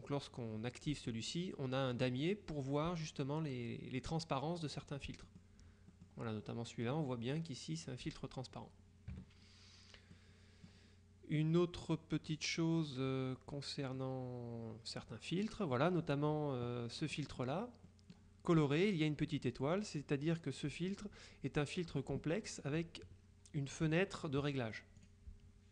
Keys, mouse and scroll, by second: 5.4-6.6 drag, 9.2 KP_Subtract, 10.2-11.2 drag, 11.9 click, 14.0-15.6 drag, 17.1 click, 20.4 click, 25.1 click.